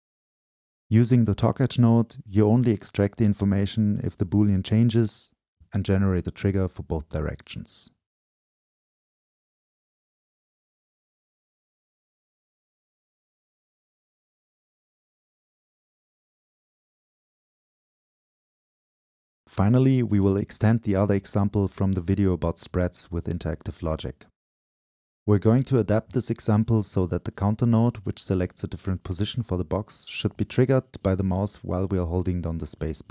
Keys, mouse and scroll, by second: 0.1-2.4 drag, 2.4 Left, 2.7 Up, 4.3 drag, 10.7-16.4 drag, 17.0 click, 18.0 ctrl+w, 20.2-22.4 drag, 24.1-26.3 drag, 26.3-27.4 scroll down 2, 27.4-28.9 drag, 28.9-31.0 scroll up 2, 31.0 scroll up 1, 31.7 click, 32.2 Delete, 32.6-33.1 drag.